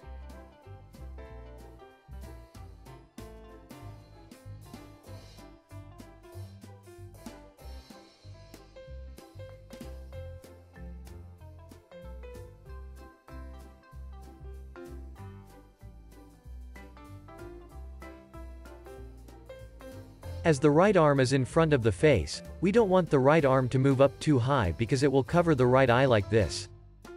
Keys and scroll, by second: 18.1 z, 20.3 alt+shift+s, 22.6 x, 23.5 z.